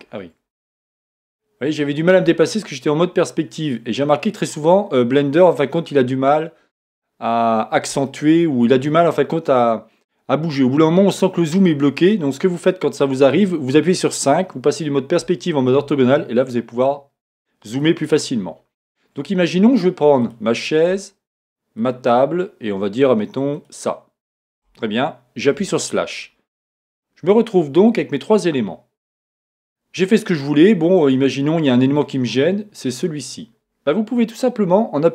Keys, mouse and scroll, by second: 0.6 scroll up 1, 1.5-16.2 middle drag, 2.4-3.0 scroll down 2, 3.0-3.6 scroll up 2, 4.0-6.6 scroll down 2, 6.6-7.3 scroll up 2, 7.3-8.1 scroll down 2, 16.2-16.7 scroll up 1, 16.7-20.2 middle drag, 16.7 scroll down 1, 20.2 click, 21.8 shift+click, 23.6 shift+Left, 23.6 click, 25.6 KP_Divide, 26.2-26.8 scroll down 1, 26.8-33.0 middle drag, 33.0 click, 33.1-35.0 middle drag.